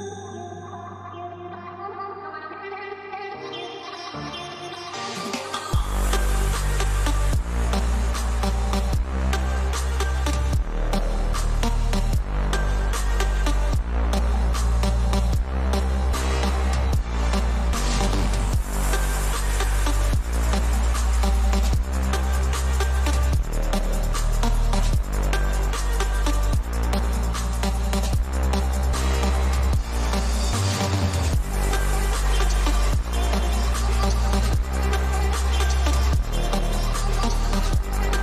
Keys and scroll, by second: 0.8 [, 0.9 ctrl+=, 10.2 p, 10.5 b, 27.1 ctrl+=, 28.4 [, 33.6 [.